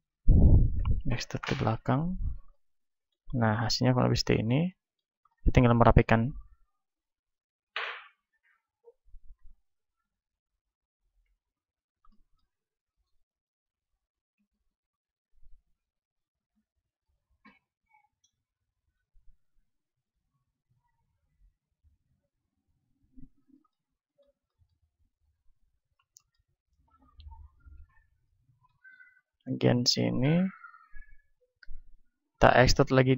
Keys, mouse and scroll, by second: 0.1-4.3 drag, 0.7 e, 4.3 middle click, 6.1 click, 8.1-12.0 super+drag, 11.0 KP_1, 12.0-13.6 middle drag, 12.9-15.2 drag, 16.2 right click, 18.7 right click, 19.0-23.7 drag, 19.1-22.0 right drag, 22.0-25.0 middle drag, 25.0-27.6 drag, 25.0-27.4 right drag, 27.1 a, 27.4-31.7 middle drag, 27.6-31.4 right drag, 30.8-32.6 drag, 32.6 e.